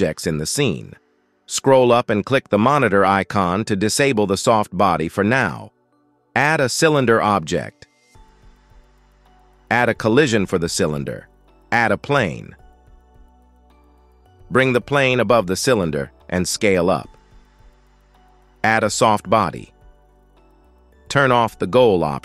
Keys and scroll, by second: 7.3 shift+a, 13.0 shift+a, 15.1 s, 16.5 g.